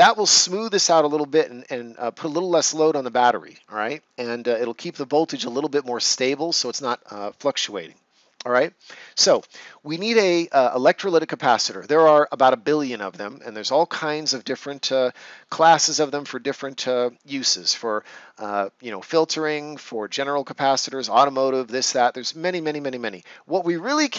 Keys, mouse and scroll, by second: 9.3 ctrl+s.